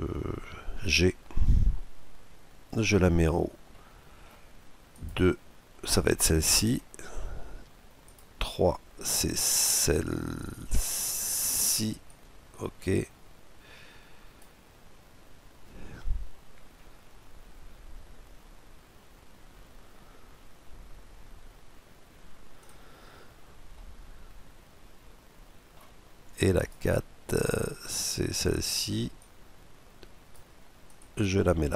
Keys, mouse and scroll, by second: 0.5 g, 3.4-5.1 middle drag, 4.6-6.3 right drag, 6.4-8.0 middle drag, 7.7-13.4 right drag, 23.4-25.1 middle drag, 26.3-31.0 right drag, 28.8-29.7 scroll down 1, 29.7 scroll down 1, 31.5-31.7 middle drag.